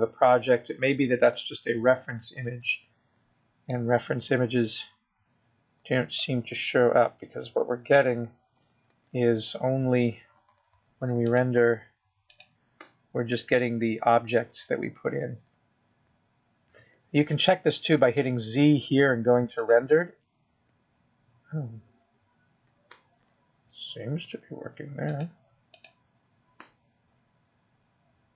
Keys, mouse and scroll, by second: 0.7-1.2 scroll up 3, 6.1 middle click, 11.0 KP_0, 13.7 click, 20.6 z, 23.8-24.6 scroll up 1, 24.6 scroll down 2, 27.5 click.